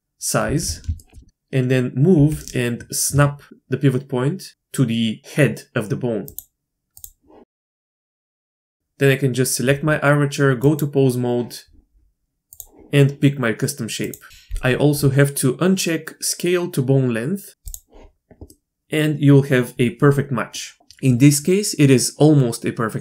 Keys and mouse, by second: 0.4 alt+s, 0.9 shift+drag, 2.1 g, 6.9 click, 7.9 Tab, 10.6 click, 12.5-14.0 drag, 17.6 click, 18.5 middle click, 20.6 middle click.